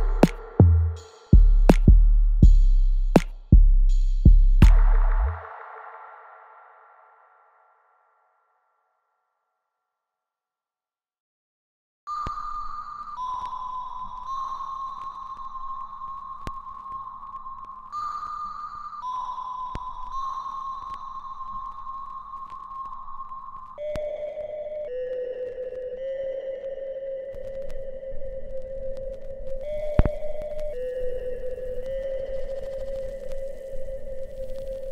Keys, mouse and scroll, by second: 0.8 alt+click, 1.5 alt+right click, 2.4 click, 2.9 alt+click, 3.7-4.7 scroll down 1, 4.7 click, 6.7 alt+right click, 7.6 alt+middle click, 8.1 click, 8.4 alt+right click, 9.1-10.6 alt+drag, 10.6 alt+middle click, 11.3 alt+right click, 11.9 alt+right click, 12.0 alt+middle click, 12.6 click, 13.1 alt+middle click, 13.8 right click, 14.8 click, 15.4 alt+middle click, 18.7 shift+click, 21.8 alt+middle click, 22.9 alt+click, 23.8 alt+middle click, 25.0 shift+click, 27.5 alt+click, 28.2 alt+right click, 29.0 shift+click, 32.3 alt+right click, 32.8 alt+click, 34.6 ctrl+b.